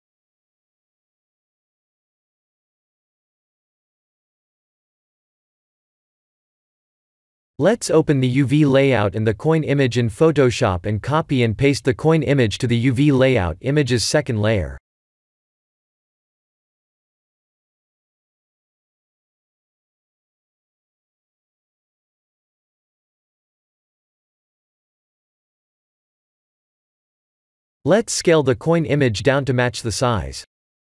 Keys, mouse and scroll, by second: 1.7 Return.